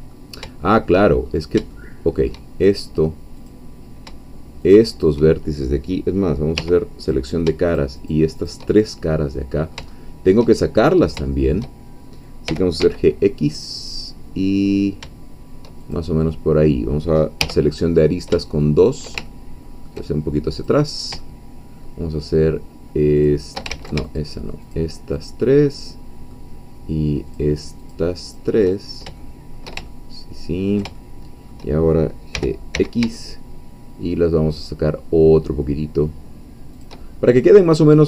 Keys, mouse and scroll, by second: 0.5 shift+middle click, 1.2-1.7 shift+scroll up 4, 1.7 shift+middle click, 3.3 click, 4.7 shift+click, 6.5 3, 7.1 click, 7.7 shift+click, 8.1 shift+click, 8.7 shift+scroll down 1, 9.0-12.1 shift+middle drag, 12.5 g, 12.8 x, 15.8 shift+click, 16.3 shift+middle click, 17.4 2, 17.8-18.1 scroll up 1, 18.6 shift+middle click, 19.3-20.5 ctrl+shift+middle drag, 20.7 click, 21.2 shift+middle click, 23.3 shift+click, 23.7 ctrl+shift+z, 24.0-25.4 ctrl+shift+drag, 25.5 shift+middle click, 27.3 shift+click, 28.3 shift+click, 28.8 shift+scroll down 1, 29.1 shift+middle click, 29.9-30.9 ctrl+shift+middle drag, 31.0-32.1 ctrl+shift+middle drag, 32.3 g, 32.7 x, 36.8 shift+click, 37.1 shift+scroll down 1, 37.4 middle click.